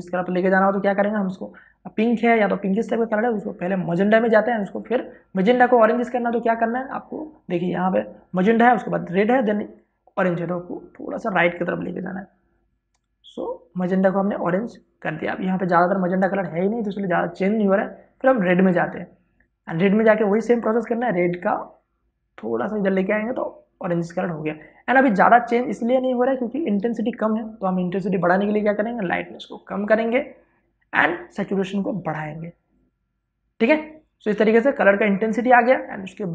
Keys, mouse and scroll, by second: 4.8 click, 12.1-29.8 drag, 29.8-36.3 drag.